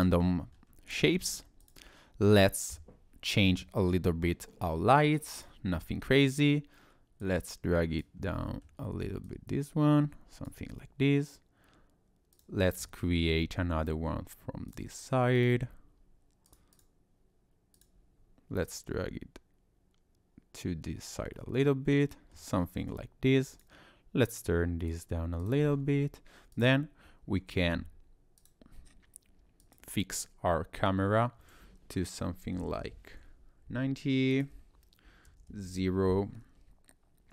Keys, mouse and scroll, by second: 0.5 scroll down 2, 1.6 click, 5.4 click, 6.9 click, 8.3 middle click, 9.3 click, 12.3 click, 13.5 shift+d, 15.4 click, 16.5 click, 16.7 click, 17.8 click, 18.7 click, 21.4 middle click, 23.5 click, 24.3 click, 25.4 click, 25.7-26.5 scroll down 3, 26.5 click, 28.4 click, 29.6 click, 34.3 click.